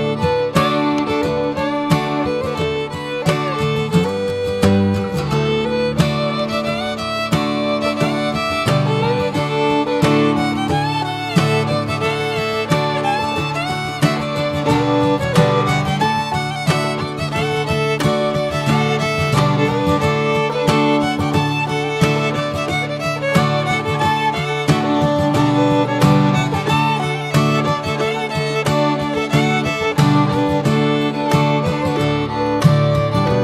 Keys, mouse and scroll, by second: 0.7 middle drag, 1.0 scroll up 1, 1.4-2.2 shift+middle drag, 2.2 scroll up 1, 2.4-2.9 shift+middle drag, 2.9 click, 3.9-7.3 drag, 8.0 drag, 8.4-8.8 middle drag, 8.8 click, 9.1-9.6 shift+middle drag, 9.6 click, 9.9 shift+click, 10.0 shift+a, 13.2-15.7 drag, 16.2-17.8 drag, 18.5 click, 19.0 Tab, 19.5 Tab, 19.7 click, 20.4 ctrl+a, 21.1 right click, 22.3-22.7 right drag, 23.0 drag, 23.3 alt+middle click, 24.6-25.0 drag, 25.0-25.6 shift+middle drag, 25.6 click, 26.3 s, 28.9 click, 31.0 middle click, 31.3 Tab, 31.5 click, 32.2 alt+middle click, 32.5 alt+middle click.